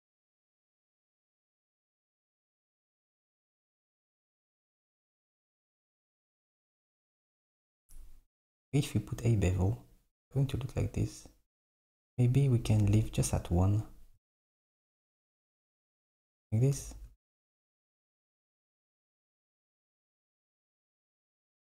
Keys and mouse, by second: 1.7 KP_7, 4.3 click, 6.9 ctrl+b, 15.3 click, 17.1 alt+z, 18.1 s, 19.3 Tab, 21.3 Tab.